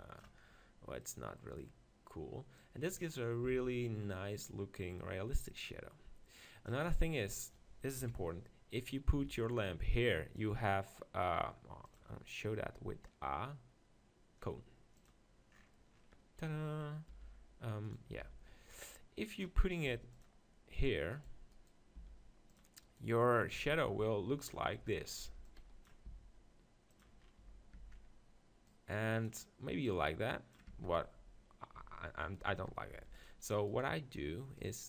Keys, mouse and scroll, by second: 1.1-3.0 middle drag, 2.6-4.2 drag, 3.5 z, 4.2-6.7 middle drag, 5.6-7.4 drag, 7.0 middle click, 7.4 middle click, 8.0 KP_1, 9.2 z, 9.6-13.6 drag, 16.0-18.0 middle drag, 17.1 r, 18.2 g, 19.4-21.1 drag, 19.9 g, 20.8-26.3 right drag, 22.0 g, 22.6-24.3 drag, 23.5 g, 24.8 Tab, 25.1-26.3 drag, 25.2 b, 26.1 s, 27.4 Tab, 27.7 Tab, 29.9-31.6 drag, 31.0 x, 31.8 Tab, 32.2-33.2 middle drag, 32.5 Tab, 32.9 g, 33.7-34.8 right drag, 34.6-34.8 drag.